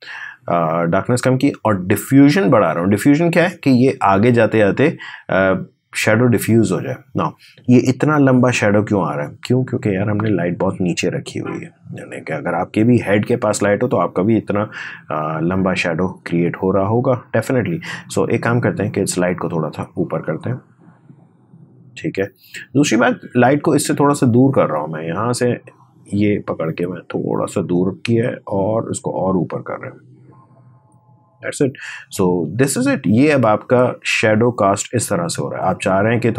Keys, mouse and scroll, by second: 0.2-6.4 drag, 9.2-12.2 drag, 16.7-24.1 drag, 24.4-33.5 drag, 36.0-36.3 drag.